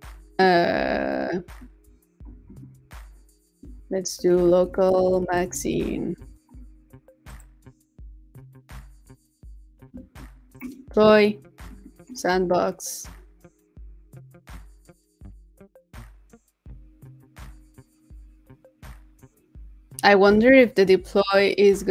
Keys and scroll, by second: 6.4 super+s, 8.1 super+s, 9.9 shift+super+p.